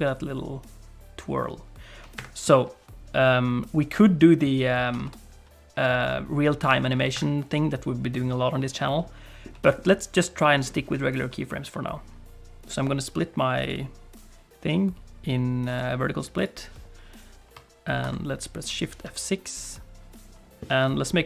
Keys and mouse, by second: 4.9 r, 9.0 middle click, 9.6 shift+middle click, 9.9 middle click, 13.6-16.4 right drag, 18.0 shift+F6.